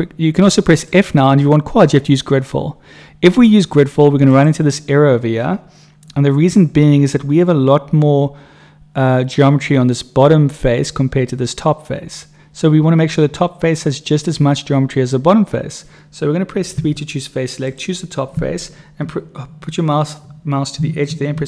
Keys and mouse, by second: 0.6-4.7 drag, 16.8 3, 17.6 click, 21.2 ctrl+r.